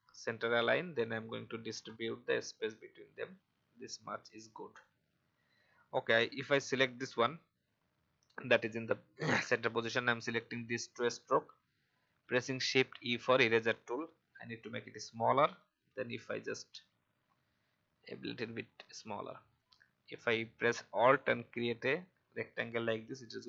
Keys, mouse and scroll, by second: 4.0-4.4 alt+scroll down 1, 4.7 click, 5.4-6.0 alt+scroll up 1, 6.3 click, 10.9 shift+click, 19.7-21.2 alt+drag.